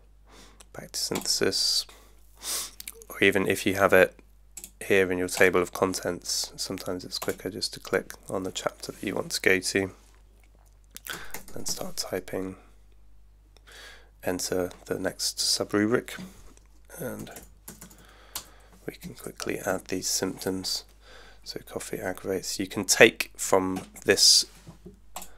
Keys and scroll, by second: 10.9-12.2 typing, 13.8 Return, 17.0-18.5 typing, 19.0 Down, 19.7 Right.